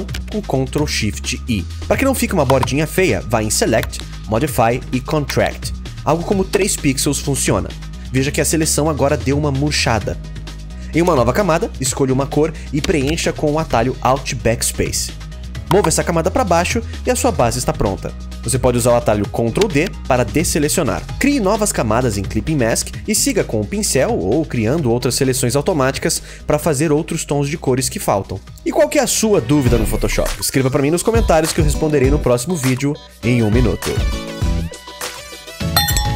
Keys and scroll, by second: 12.8 alt+BackSpace, 19.3 ctrl+d.